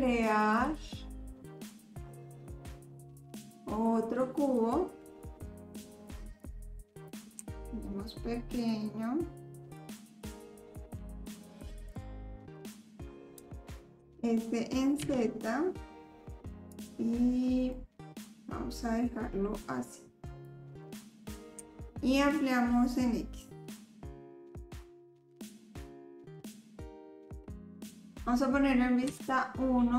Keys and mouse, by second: 0.5-4.7 drag, 6.1-7.1 drag, 7.4 s, 10.1-10.7 middle drag, 11.9-13.4 drag, 14.0 s, 17.7-19.6 middle drag, 20.4 click, 21.6 s, 24.4 s, 25.3 click, 25.3 middle click, 25.6 ctrl+s, 25.9 click, 25.9 middle click, 26.4 shift+click, 26.6 drag, 27.3 click, 27.7 click, 29.1 KP_1.